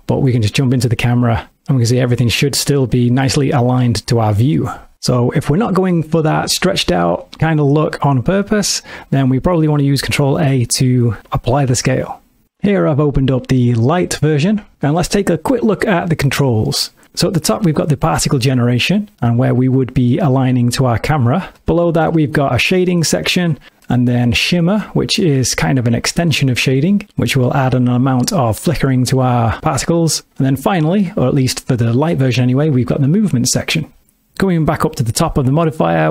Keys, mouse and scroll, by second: 2.0 ctrl+middle click, 4.9 space, 7.1 s, 8.9 click, 9.5-9.9 scroll up 1, 10.1 ctrl+a, 12.5 click, 17.0 middle click, 20.2 click, 21.6 middle click, 23.8 middle click, 34.3 middle click.